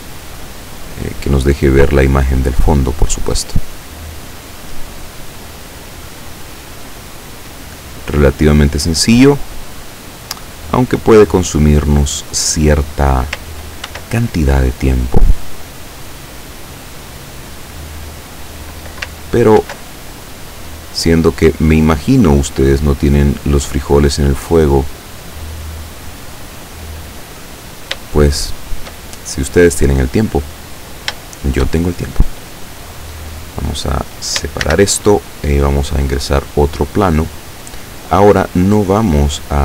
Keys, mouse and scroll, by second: 0.0 right click, 0.9-2.2 drag, 3.0 right click, 3.7-5.4 drag, 5.9-7.7 drag, 8.1-9.4 drag, 10.0 right click, 10.8-12.8 drag, 13.9 ctrl+r, 14.4 ctrl+click, 15.0 click, 15.7 right click, 16.3-18.6 drag, 19.7 ctrl+r, 20.2 ctrl+click, 21.1 click, 21.9 right click, 22.6 click, 24.2 right click, 24.7-26.6 drag, 28.3 shift+middle click, 34.7 shift+a, 36.1 click, 38.5-39.6 drag.